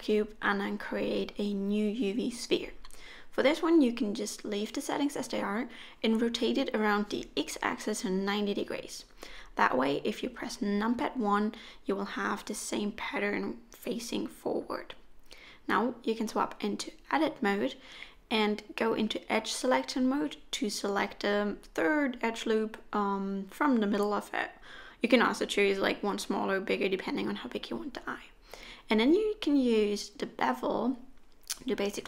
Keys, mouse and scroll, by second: 0.5 shift+a, 4.3 r, 8.6 middle click, 9.7 KP_1, 10.8-11.6 scroll up 7, 15.1 Tab, 17.2 2, 21.2 alt+a, 22.5 alt+click, 24.1 ctrl+b.